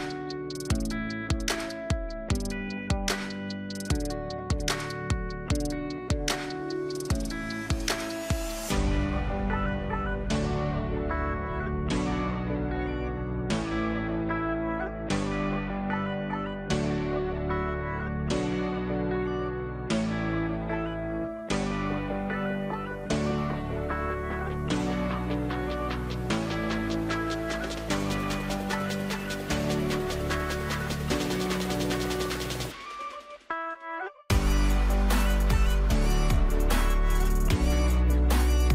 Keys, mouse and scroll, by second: 2.5 alt+click, 5.0-12.5 drag, 16.8-18.7 drag, 24.5 alt+click, 27.0 click, 28.9 alt+click, 30.6 click, 37.8 alt+click.